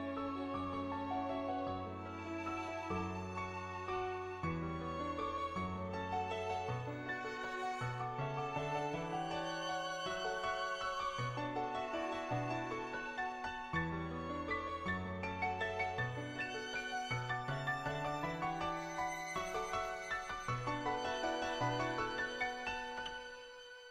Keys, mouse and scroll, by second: 1.4 middle click, 2.2 shift+middle click, 2.5 middle click, 3.3 shift+middle click, 3.8 middle click, 5.4 click, 6.4 Tab, 8.0 l, 8.4 l, 8.8 middle click, 9.8 click, 10.1 middle click, 11.6 middle click, 12.7 middle click, 14.4 middle click, 15.0 middle click, 17.7 middle click, 18.1 click, 19.5 Tab, 20.5 shift+middle click, 20.8 middle click, 21.8 middle click.